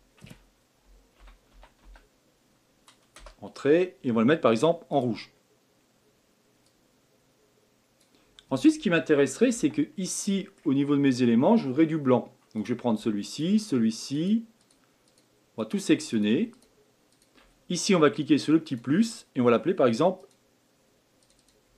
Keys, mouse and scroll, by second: 4.9 click, 9.5 Tab, 10.1-12.6 middle drag, 12.6 click, 13.3 shift+click, 14.1 shift+click, 14.6 shift+click, 15.0 shift+click, 15.6 shift+click, 16.1 shift+click, 16.5 shift+click, 17.1 shift+click, 18.6-21.3 drag, 21.4-21.7 drag.